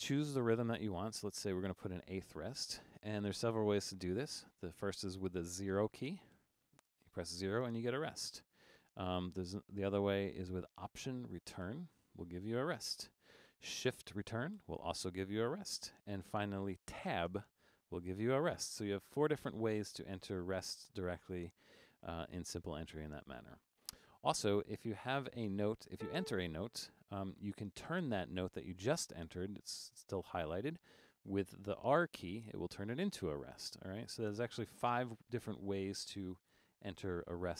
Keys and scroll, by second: 0.6 4, 6.4 0, 11.7 alt+Return, 14.6 shift+Return, 17.3 Tab, 24.9-26.5 typing, 32.3 r.